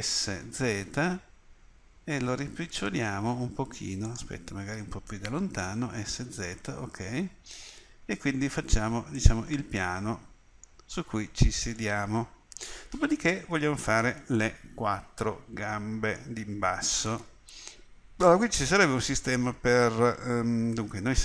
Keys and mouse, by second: 0.0 s, 5.8 s, 11.0-13.6 middle drag.